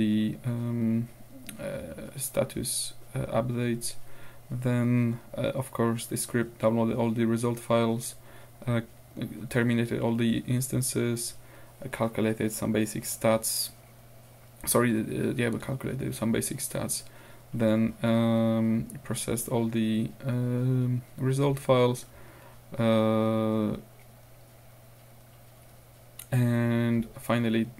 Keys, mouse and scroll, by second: 4.6-5.2 scroll down 2, 7.0-7.3 scroll down 2, 8.1-8.9 scroll down 4, 9.2-9.7 scroll up 2, 11.0-11.3 scroll down 2, 13.0-14.6 scroll down 2, 15.0 scroll up 2, 15.7-17.1 scroll down 6, 17.6-17.9 scroll down 2, 17.9-18.6 scroll up 2, 20.6-21.0 scroll down 2, 21.4 scroll down 2, 22.4 scroll down 2, 25.3-25.8 scroll down 2, 27.4-27.7 scroll down 2.